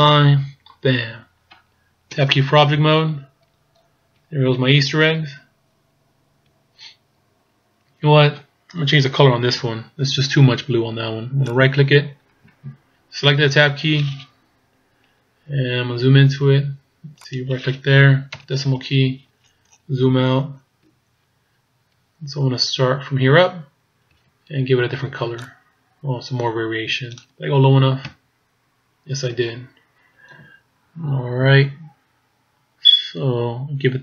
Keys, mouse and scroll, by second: 0.0 click, 1.0-2.2 scroll down 1, 2.2 Tab, 2.7-3.8 scroll down 5, 4.2-5.3 scroll down 3, 5.3-5.8 scroll up 3, 5.8-6.7 scroll down 4, 6.7-7.5 shift+scroll down 1, 11.6 right click, 13.7 Tab, 15.9-16.7 scroll up 2, 17.3 right click, 18.4 KP_Decimal, 19.5-19.8 scroll down 6, 20.3 shift+scroll down 1, 24.2 z, 24.9 b, 28.1 z, 30.7-31.3 scroll down 1, 33.5-34.0 scroll down 1.